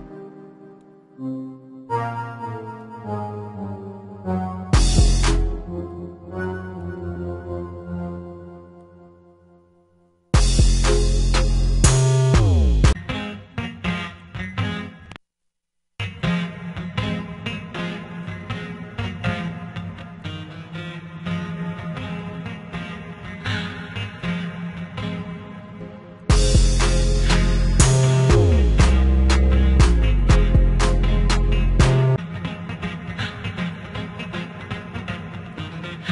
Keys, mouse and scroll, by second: 11.9 F1.